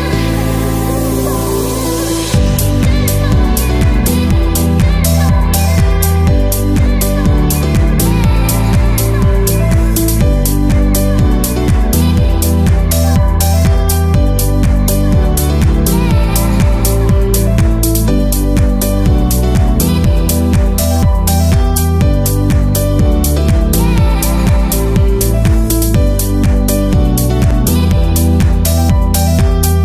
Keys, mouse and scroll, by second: 0.1 click, 0.1 middle click, 0.5 middle click, 0.5 click, 0.8 f, 0.9 click, 1.1 scroll down 4, 1.1 KP_3, 1.3 scroll up 1, 1.7 scroll down 4, 2.0 shift+middle click, 2.2 scroll up 6, 2.6 shift+middle click, 3.6 click, 3.6-4.1 scroll down 7, 3.7 shift+middle click, 3.9 middle click, 4.1 click, 4.4 x, 4.6 click, 4.8 x, 5.0 x, 5.6 shift+middle click, 5.7 shift+middle click, 6.1 shift+middle click, 6.1 click, 6.2-8.7 typing, 6.5 click, 6.7 scroll up 1, 6.9 middle click, 6.9 alt+click, 7.1-7.4 scroll down 11, 7.3-7.7 scroll up 4, 7.7 alt+click, 8.0 middle click, 8.2 middle click, 8.4 scroll up 2, 8.4 shift+middle click, 8.8-9.2 scroll down 8, 9.1 middle click, 9.6 scroll up 2, 9.8 alt+click, 10.1 middle click, 10.1 scroll down 4, 10.4 middle click, 10.5 shift+middle click, 10.6 shift+middle click, 10.9 shift+middle click, 10.9 middle click, 11.1 shift+middle click, 11.2-11.6 scroll up 21, 11.5 middle click, 11.6 KP_7, 11.8-12.1 scroll down 40, 11.8 KP_3, 12.1 middle click, 12.1-12.6 scroll up 5, 12.6 e, 13.2 right click, 13.7 right click, 13.7 scroll up 10, 14.3 ctrl+z, 14.3 click, 14.6 shift+middle click, 14.9 shift+middle click, 14.9 scroll down 11, 15.0-15.4 scroll up 26, 15.4 click, 15.6 scroll down 15, 15.6 shift+middle click, 15.9 shift+middle click, 15.9 scroll up 4, 16.0 middle click, 16.1 scroll down 1, 16.4 click, 16.5-17.1 scroll up 40, 17.0 click, 17.2-17.6 scroll down 18, 17.5 middle click, 18.1 click, 18.1 1, 18.4 shift+click, 18.7 KP_8, 19.1 shift+middle click, 19.1 shift+KP_3, 19.4 shift+middle click, 19.4 click, 19.8 x, 20.5 middle click, 20.6 shift+middle click, 20.8 shift+middle click, 20.8-21.1 scroll up 27, 21.1 click, 21.3 click, 22.4 click, 22.5 shift+click, 22.7 middle click, 22.7 scroll up 10, 23.8 click, 23.8 scroll down 5, 24.5-24.9 scroll down 19, 24.6 shift+middle click, 24.6-25.0 scroll up 11, 25.0 scroll down 2, 26.5 shift+click, 26.6 click, 26.9 shift+click, 26.9 right click, 27.7 click, 27.7 click, 28.0-29.8 typing, 28.4 shift+middle click, 28.4 scroll down 10, 28.5-29.0 scroll up 10, 28.6 shift+middle click, 29.7 middle click.